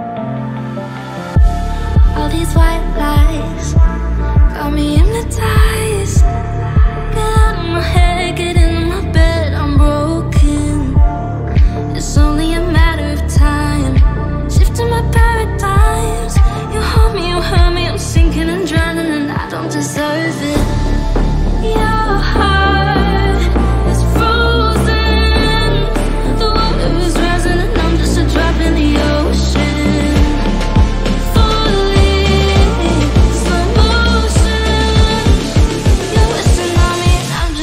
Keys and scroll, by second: 17.2 F3, 17.3 Escape, 17.8 shift+F2, 18.0 F3, 18.1 Escape, 23.0 F3, 23.5 F4, 29.0 shift+F2, 29.1 Escape, 31.0 ctrl+z, 31.5 Escape.